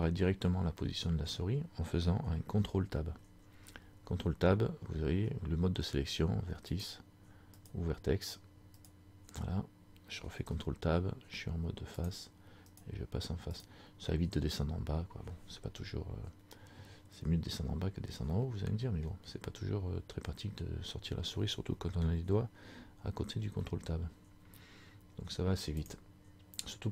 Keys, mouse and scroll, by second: 0.9 middle click, 1.4-2.1 scroll down 1, 3.3 ctrl+Tab, 7.7 right click, 10.4 ctrl+Tab, 12.8 right click, 13.7 right click, 18.4 scroll up 1, 18.5 middle click, 19.2-19.8 scroll down 1, 23.5 ctrl+Tab.